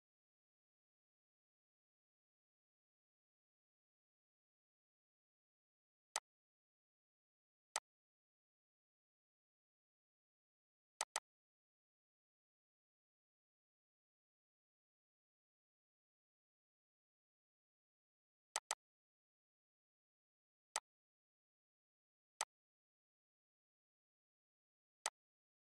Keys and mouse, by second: 5.8-11.5 drag, 12.8 Tab, 18.2-22.1 drag, 24.7-25.6 drag.